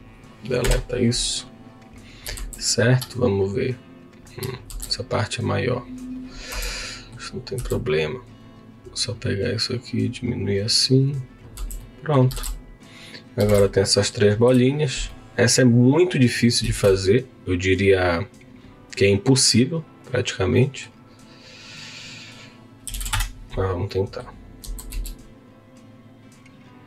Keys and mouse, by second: 0.7 Delete, 5.6 click, 6.5 Tab, 6.7 middle click, 7.6 3, 7.8 click, 9.3 click, 11.6 Tab, 11.8 click, 13.5 Tab, 14.4 KP_3, 15.1 click, 16.2 middle click, 16.7 shift+a, 20.6 middle click, 22.0-23.3 drag, 23.9 middle click, 24.6 s.